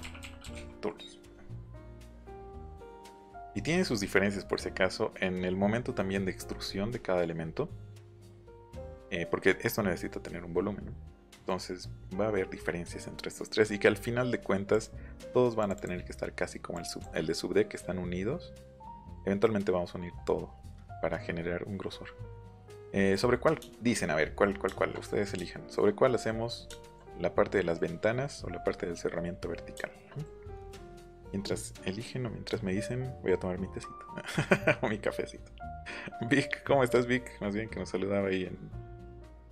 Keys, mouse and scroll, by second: 0.0-0.9 typing, 2.2 click, 2.4 click, 9.3-9.7 scroll up 2, 10.8-11.4 scroll down 4, 14.6 click, 15.5 click, 16.7 click, 18.8 Escape, 20.8 middle click, 23.1 middle click, 23.5 shift+middle click, 24.1 middle click, 24.3 shift+middle click, 25.2 middle click.